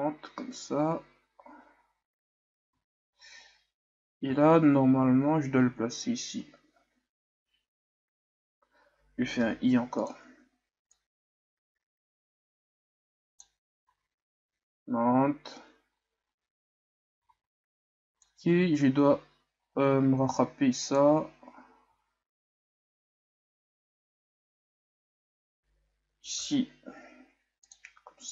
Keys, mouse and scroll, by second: 4.6-5.5 scroll down 4, 5.5-6.1 scroll down 1, 6.1-7.6 scroll down 1, 7.6-8.5 scroll down 1, 8.5-10.1 scroll down 1, 10.1-11.1 scroll down 1, 11.1-14.0 drag, 14.0 alt+a, 17.3 alt+a, 18.3-21.2 drag, 22.7-23.7 scroll up 2, 23.7-24.5 shift+scroll up 2.